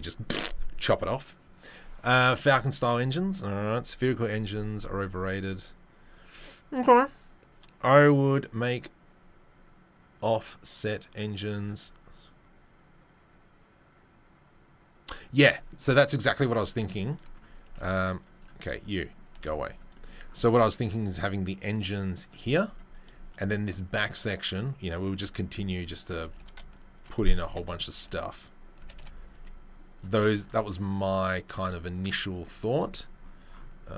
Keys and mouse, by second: 15.4 click, 15.4 right click, 17.0 click, 17.0 right click, 17.6 g, 19.3-28.4 right drag, 19.3 g, 20.9-22.7 drag, 24.2 click, 25.4 s, 26.2 g, 27.4 s, 28.0 g, 28.4-33.9 middle drag, 28.8 g.